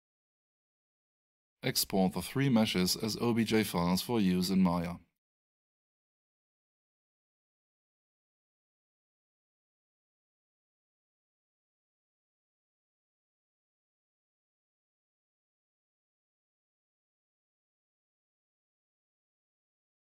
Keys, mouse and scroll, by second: 11.6 click, 13.6 click, 14.6 Return, 19.0 Return.